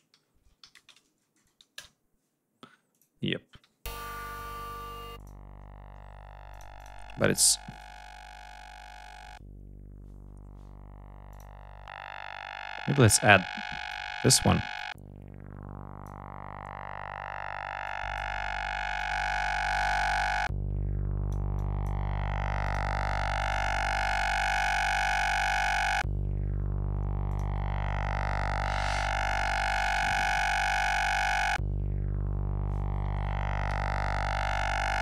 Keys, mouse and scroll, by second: 0.0-1.2 typing, 1.6 Return, 2.7 click, 3.7 l, 5.0 click, 6.3 click, 7.5 right click, 11.2 click, 13.1 click, 14.6-16.1 drag, 17.7-18.2 drag, 18.8-21.3 drag, 21.4 click, 22.5 click, 23.3 right click, 27.1 click, 28.9-30.3 typing.